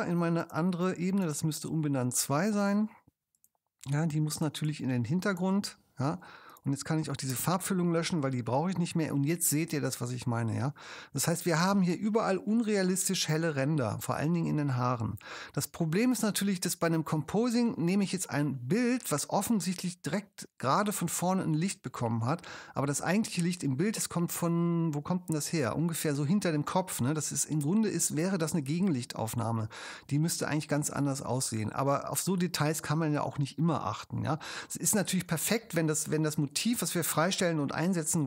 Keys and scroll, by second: 7.3 BackSpace.